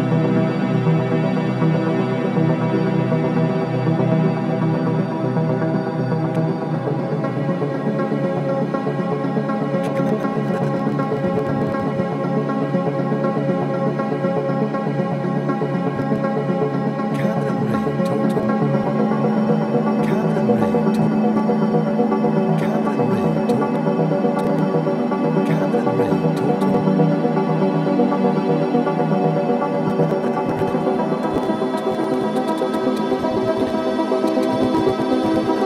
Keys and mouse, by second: 0.2-1.4 typing, 2.3 shift+click, 3.4-6.2 drag, 7.0 typing, 8.7-9.7 drag, 9.8-12.9 drag, 12.7 typing, 15.1 click, 16.0 click, 16.3 typing, 18.3-19.2 typing, 18.8 click, 20.9 typing, 21.3 click, 23.5-25.2 typing, 24.4-27.5 drag, 27.3-28.0 typing, 27.8 ctrl+alt+click, 28.4 alt+shift+click, 28.8-29.6 drag.